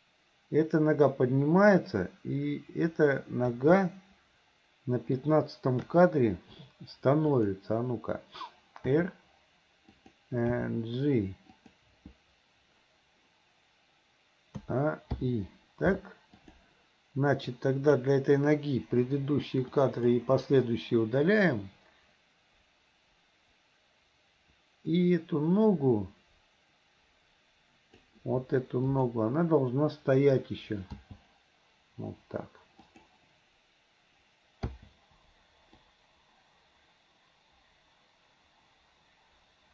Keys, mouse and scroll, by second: 3.8-5.2 middle drag, 5.9 KP_3, 7.3 click, 8.9 r, 10.5 g, 14.6 a, 15.2 i, 16.4 click, 17.6 click, 19.0 Delete, 19.9 click, 20.4 Delete, 21.3-28.1 drag, 28.9 click, 31.0 g, 34.7 i, 35.9-39.7 drag.